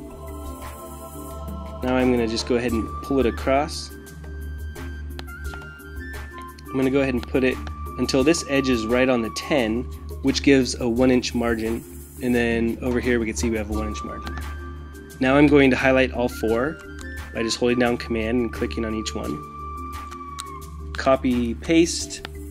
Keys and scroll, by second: 21.0 super+c, 21.5 super+v.